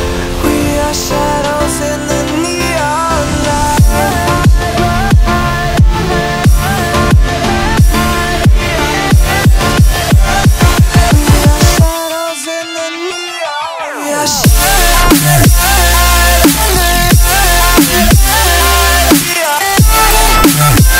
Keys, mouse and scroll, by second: 0.0 r, 1.1 e, 1.8 r, 2.9 click, 3.3 s, 4.1 click, 4.4 e, 6.2 shift+click, 6.4 f, 6.8 click, 7.2 v, 8.0 click, 8.7 scroll up 2, 8.9 shift+middle click, 9.2 click, 10.1 s, 11.0 click, 12.4 click, 12.6 s, 13.3 click, 14.3 scroll, 14.3-15.3 scroll down 9, 14.5 Tab, 15.3 ctrl+s, 15.6-16.9 middle drag, 16.9-17.9 right drag, 18.8 click, 18.9 click, 19.1-20.2 drag.